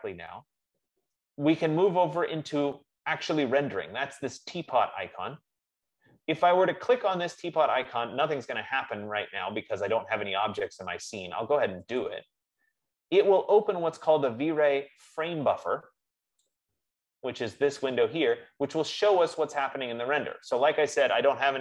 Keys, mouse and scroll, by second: 0.2-5.3 drag, 5.9 F15, 12.2-14.9 drag, 16.8 click.